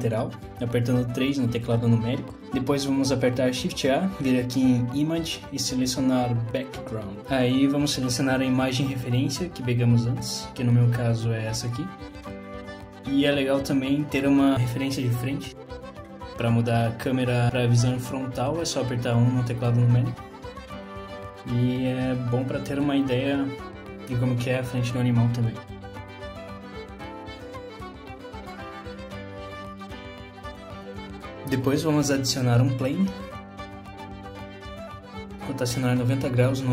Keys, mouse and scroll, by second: 1.2 shift+middle click, 2.8 shift+a, 11.2 s, 16.0 shift+middle click, 16.0-16.5 scroll up 2, 17.3-18.0 scroll down 1, 20.1 KP_1, 21.8 shift+a, 30.0 KP_3, 30.5 KP_1, 30.9 KP_3, 31.3 scroll down 1, 31.6 click, 32.3 shift+a.